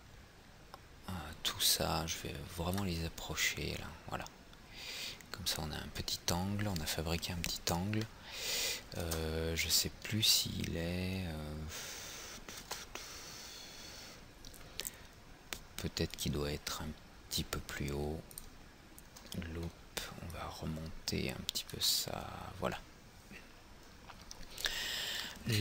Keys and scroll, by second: 9.1 alt+Tab, 12.8 alt+Tab.